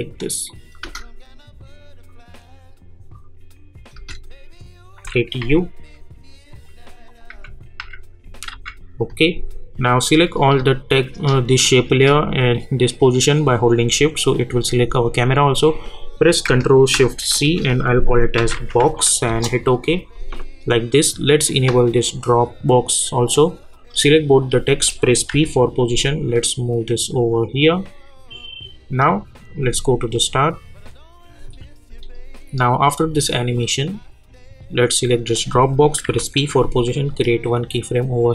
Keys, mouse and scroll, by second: 0.5 click, 3.9 space, 6.5 click, 7.3-8.5 typing, 9.8 click, 17.3 c, 23.7 click, 25.3 p, 36.0 p.